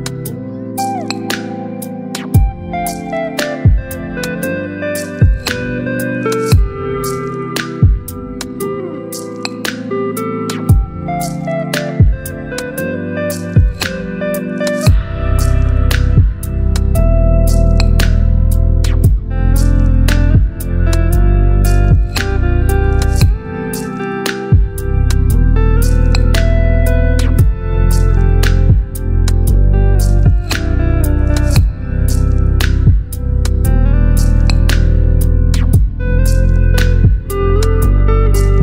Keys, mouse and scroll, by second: 4.6 click, 4.7-6.8 alt+drag, 8.1 ctrl+t, 9.8 right click, 11.0-22.7 drag, 25.0 click, 28.2-29.6 shift+drag, 30.6 ctrl+t.